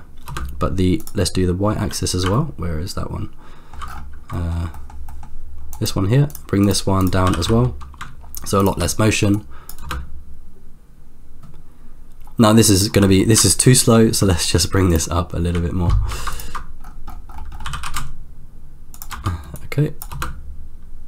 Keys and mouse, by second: 0.3 space, 1.0 click, 2.3-3.8 ctrl+middle drag, 4.3 middle click, 4.9 middle click, 5.2 middle click, 6.0 click, 7.0 click, 7.5 g, 9.3-10.0 drag, 10.0 space, 12.9 space, 13.5 ctrl+middle click, 17.6 g, 19.6 click, 20.3 space.